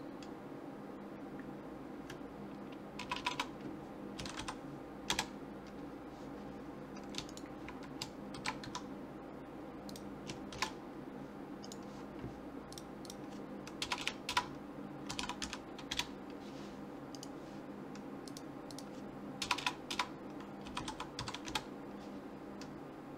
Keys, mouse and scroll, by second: 3.2 BackSpace, 3.3 BackSpace, 7.3-8.8 right drag, 8.3 shift+d, 10.5 shift+r, 12.7 click, 14.0 BackSpace, 17.1 click, 17.4 right click, 18.3-20.0 drag, 19.6 BackSpace.